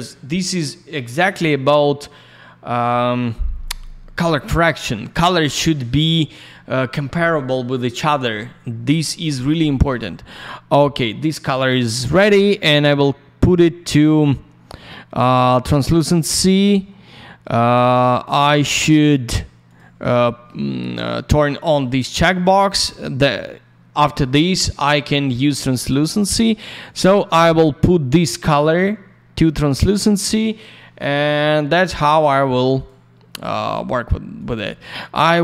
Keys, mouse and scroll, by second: 9.6 click, 9.8 click, 19.6 click, 19.7 click, 25.9 click, 26.8 click, 29.5 click, 29.7 click, 32.7 click, 32.8 click, 34.3 click, 34.5 click, 35.1 click.